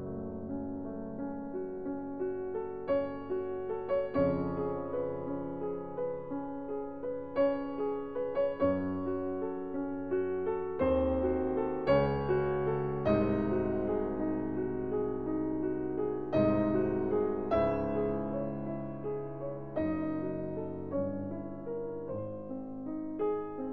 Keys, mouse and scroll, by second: 5.0 click, 7.4 click, 9.2 click, 12.7 click, 14.5 click, 16.7 click, 17.1 click, 17.2 scroll, 17.7 scroll down 5, 17.8 scroll, 18.4-19.0 ctrl+scroll, 19.2 click, 21.0 click, 23.6-23.7 scroll.